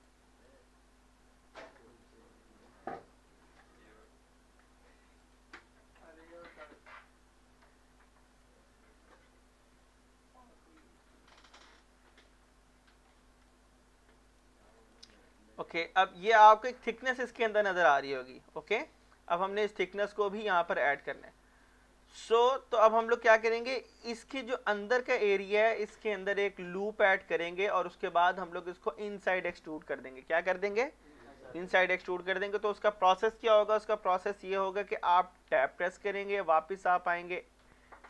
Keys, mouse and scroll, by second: 0.2-1.9 drag, 6.5 middle click, 9.0 click, 13.1 scroll down 1, 13.5 right click, 14.6 click, 15.3 scroll up 1, 18.2-18.8 scroll up 1, 18.8 middle click, 19.1 shift+middle click, 19.5 scroll up 1, 19.8 click, 22.0 scroll down 1, 22.2 middle click, 23.4 shift+middle click, 23.9-24.4 scroll up 1, 31.6 middle click, 35.5 Tab.